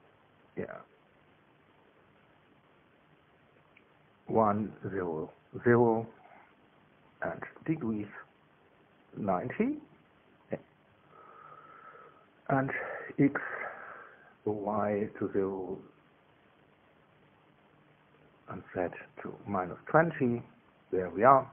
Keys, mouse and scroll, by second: 0.5 click, 3.0 click, 3.9 click, 6.0 KP_1, 6.3 Tab, 6.6 KP_0, 6.8 Tab, 7.1 KP_0, 8.9 click, 9.8 KP_9, 9.9 KP_0, 10.5 KP_Enter, 17.3-20.3 drag, 18.1 KP_0, 18.6 Tab, 20.3 KP_Subtract, 20.5 KP_2, 20.8 KP_0, 21.3 KP_Enter.